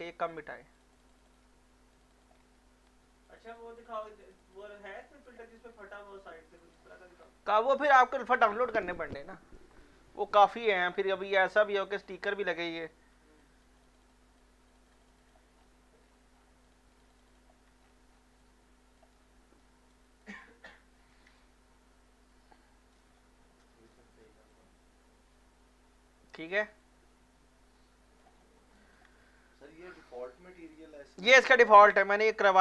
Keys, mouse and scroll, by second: 2.6 ctrl+scroll up 2, 3.3 click, 5.7 scroll up 1, 6.6 alt+click, 7.1-9.7 scroll down 1, 11.3 scroll up 1, 11.7 scroll down 1, 12.8 scroll down 1, 13.2 x, 13.4 click, 15.6 scroll down 1, 16.0 scroll up 1, 16.7 click, 17.8 scroll up 1, 18.4 alt+click, 19.2 alt+middle click, 19.6 alt+right click, 20.0 alt+click, 20.4 alt+middle click, 21.4 shift+right click, 21.4-23.2 shift+right drag, 23.2 alt+middle click, 23.6-26.8 alt+drag, 26.8-28.4 alt+drag, 28.4 alt+middle click, 28.8 alt+click.